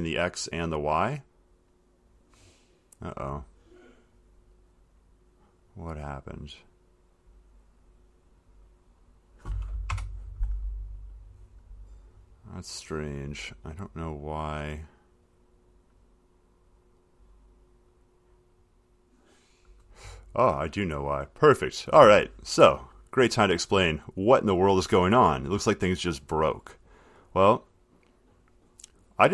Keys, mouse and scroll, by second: 0.8 click, 2.6 click, 3.9 click, 4.7 click, 8.1 click, 8.7 click, 9.4 click, 10.1 Return, 11.5 click, 15.3 click, 16.9 click, 18.2 click, 18.8 click, 29.1 click.